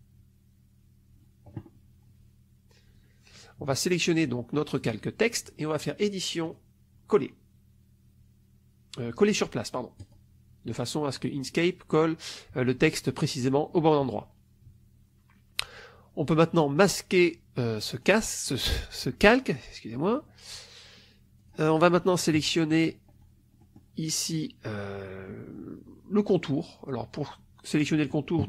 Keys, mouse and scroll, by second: 4.7 click, 6.4 click, 9.9 click, 17.9 click, 21.3 click, 22.2 -, 23.5 middle click.